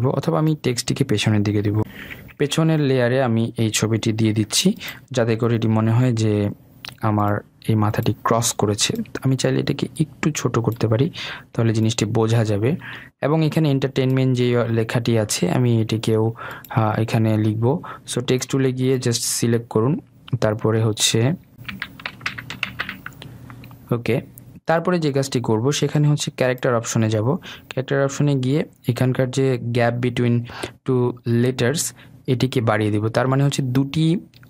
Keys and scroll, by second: 2.5 ctrl+[, 5.3 ctrl+].